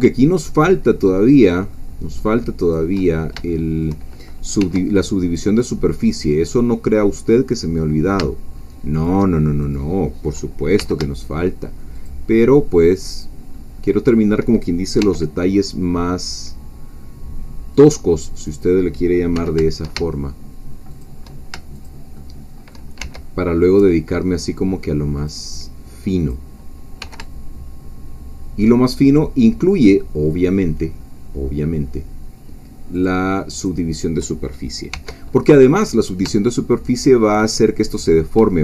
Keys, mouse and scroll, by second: 1.3 shift+click, 1.7 shift+middle click, 2.6 shift+click, 3.0-3.3 shift+scroll down 2, 3.5 shift+middle click, 4.6 e, 8.9-10.8 shift+drag, 10.8 g, 11.9 shift+click, 13.2 shift+click, 13.5 shift+middle click, 15.0 e, 17.7 click, 18.5 click, 19.3 g, 20.9 shift+click, 21.9 shift+click, 22.1 shift+middle click, 23.0 shift+e, 25.2-26.5 drag, 27.0 g, 32.9 shift+click, 34.9 e, 37.8 shift+click.